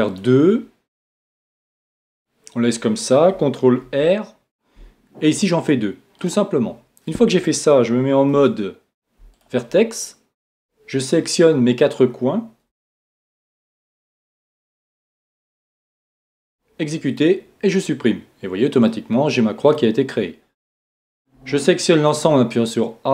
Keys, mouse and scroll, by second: 2.1-4.8 right drag, 3.8 ctrl+r, 6.2-8.1 drag, 8.3 ctrl+Tab, 10.5-12.2 right drag, 13.2-16.7 right drag, 16.2 x, 18.9-20.8 middle drag, 21.3 a.